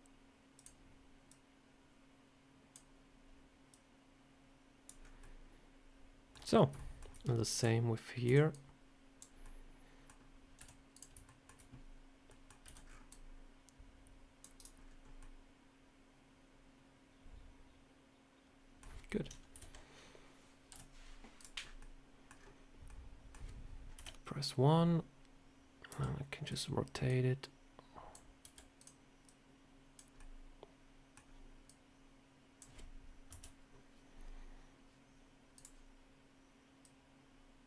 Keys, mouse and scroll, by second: 1.2 click, 3.6 click, 4.9 scroll down 2, 5.1 middle click, 6.4 scroll down 2, 6.6 shift+scroll up 1, 6.6 shift+middle click, 7.1-7.5 scroll up 3, 7.4 click, 8.1 b, 9.3 middle click, 10.4 z, 11.1 shift+middle click, 12.1 middle click, 12.5 c, 14.6 scroll up 3, 15.1 middle click, 19.4 KP_7, 20.6 z, 21.5 scroll up 3, 21.7 middle click, 22.2 scroll down 4, 22.7 middle click, 23.8 KP_1, 25.7 r, 26.9 click, 28.3 r, 29.1 click, 30.0 middle click, 31.5 click, 33.2 KP_7, 35.4 click, 36.7 click.